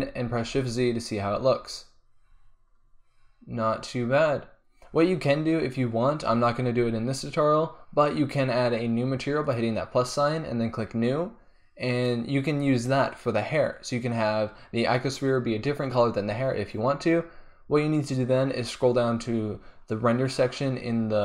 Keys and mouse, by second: 0.7 shift+z, 1.0-3.6 middle drag, 9.7-14.2 drag.